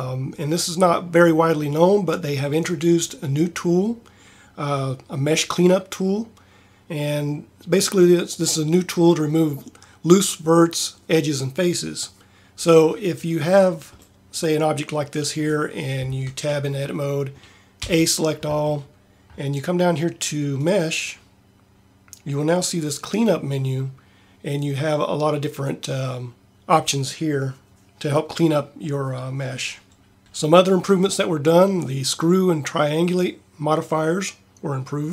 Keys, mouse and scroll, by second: 15.9 Tab, 17.8 a.